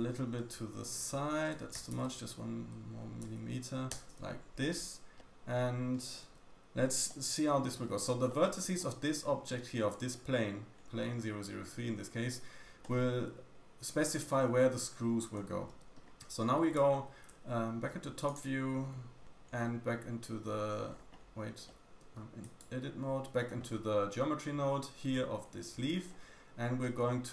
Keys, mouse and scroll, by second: 1.7 g, 5.1-6.2 scroll down 1, 6.2 Tab, 6.2 middle click, 7.0 middle click, 7.7 Tab, 8.2 middle click, 12.7 middle click, 14.1 scroll up 1, 14.4 y, 15.3 Escape, 15.6 Tab, 15.9 middle click, 16.7 y, 17.2 `, 18.2 click, 18.2 middle click, 18.2 right click, 19.7-20.2 scroll down 2, 20.8-21.1 scroll down 2, 21.3 scroll up 1, 21.6 scroll down 1, 21.6 middle click, 21.8 Tab, 21.8 a, 21.9 Tab, 22.3 click, 25.9-26.7 scroll down 1, 26.7 middle click.